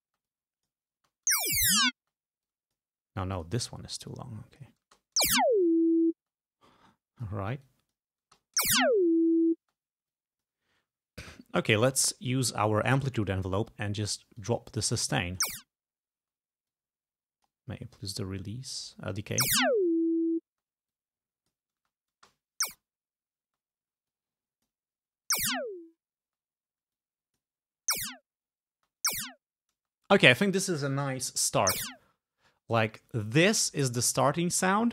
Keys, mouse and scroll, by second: 0.1 space, 0.4 click, 1.0 space, 2.1 space, 2.6 click, 3.5 click, 4.3 click, 5.0 space, 6.3 space, 6.9 click, 7.8 click, 8.4 space, 9.7 space, 10.2 click, 14.5 click, 15.6 space, 16.8-17.9 drag, 19.5 space, 20.7 space, 21.1 click, 21.9 space, 23.6 space, 24.2 click, 25.4 space, 26.4 space, 27.1 click, 28.0 space, 28.9 space, 29.9 space, 31.8 space, 32.5 space.